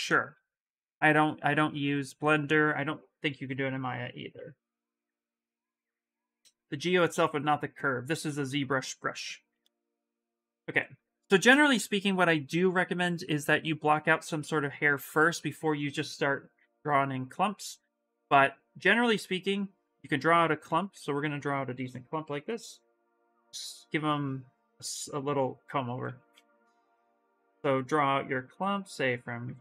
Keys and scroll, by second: 9.4 ctrl+shift+z, 10.6 s, 17.0 s, 20.4 ctrl+z, 25.8 ctrl+z, 26.1 s.